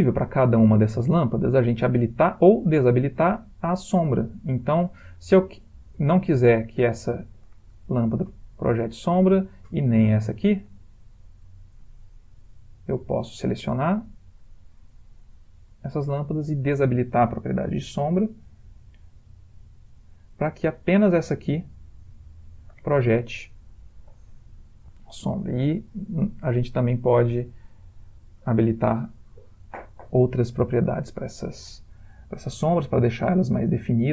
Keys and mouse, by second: 6.9 click, 8.8 click, 10.3 click, 12.9 click, 14.7 click, 18.3 click, 19.0 g, 24.4 typing, 25.1 click, 27.9 click.